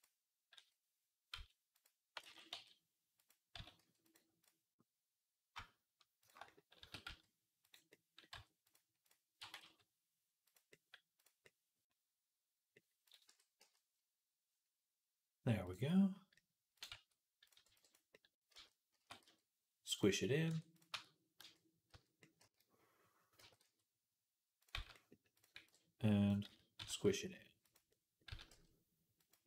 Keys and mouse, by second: 0.4 s, 2.1 ctrl+z, 2.4 s, 3.4 s, 6.4-13.1 drag, 6.6 s, 8.2 r, 9.2 r, 13.1 Tab, 13.1-15.5 middle drag, 13.4 z, 15.5-16.6 drag, 16.6-18.4 middle drag, 16.8 a, 17.5 b, 18.4-21.7 drag, 18.4 z, 18.8 s, 20.3 Tab, 20.8 Tab, 21.2 z, 21.7 z, 22.2 a, 23.2 s, 24.6 z, 25.2 click, 25.4-29.4 middle drag, 25.4 b, 26.3 z, 26.6 s, 28.1 s.